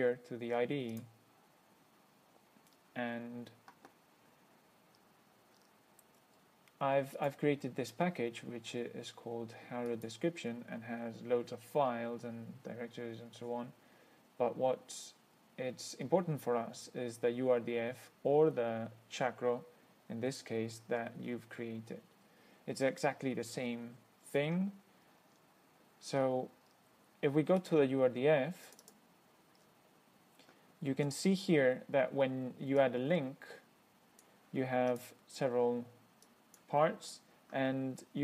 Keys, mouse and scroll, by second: 1.2 click, 5.2-6.2 scroll up 2, 7.4 click, 10.2 click, 25.4-25.8 scroll down 2, 26.9 scroll up 2, 27.9 click, 28.9 click, 29.9 scroll down 1, 33.1-34.7 drag, 35.2 click, 36.5-37.0 drag.